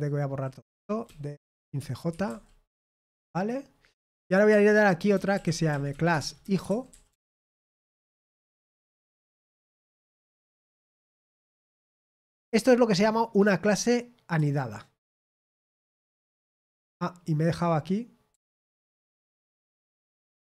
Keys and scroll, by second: 0.2-1.5 typing, 3.9-8.7 typing, 11.4-12.2 typing, 13.3 typing, 17.1-17.8 typing.